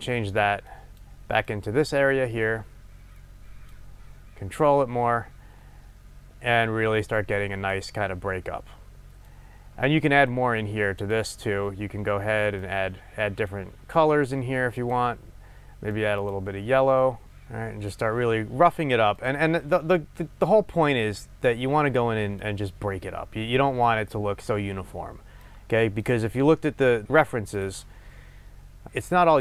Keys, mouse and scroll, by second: 9.3-11.3 drag, 12.6-15.0 drag, 19.1 click, 21.4-28.8 drag, 28.9-29.4 drag.